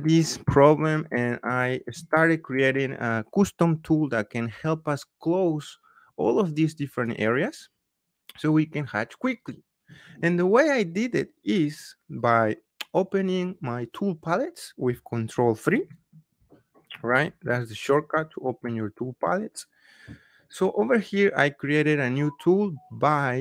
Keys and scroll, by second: 15.7 ctrl+3.